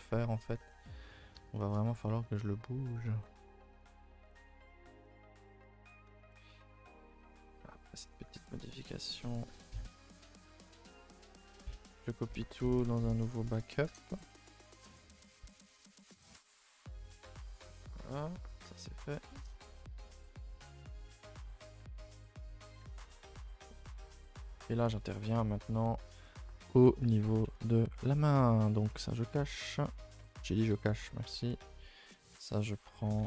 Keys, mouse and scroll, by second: 0.7 click, 0.9-1.5 scroll up 7, 1.5-2.9 shift+middle drag, 2.9 click, 3.2 g, 4.3 click, 4.3 g, 5.4 click, 5.5 g, 6.3 click, 6.6 g, 7.5-8.0 scroll down 2, 8.0 click, 8.2 g, 9.9 Tab, 10.4 middle click, 11.2 scroll down 2, 11.4-11.8 shift+middle drag, 11.8 a, 12.5 shift+d, 21.5 click, 21.8 a, 21.9 a, 22.1 middle click, 22.3-22.7 scroll up 1, 22.7 click, 22.8 Tab, 22.9 scroll up 4, 23.3 middle click, 24.2 scroll up 1, 24.4 a, 24.5 a, 26.7 shift+middle click, 27.0 a, 27.2 a, 27.4 3, 28.0 middle click, 28.8 alt+click, 29.5 k, 30.6 h, 31.4 l, 31.7-32.9 middle drag, 32.9 g.